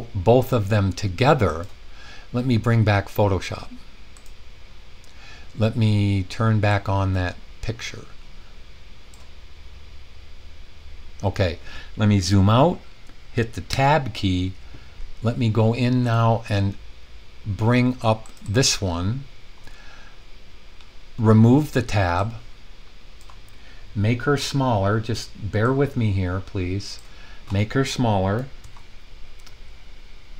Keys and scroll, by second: 13.7 Tab, 28.5 super+0.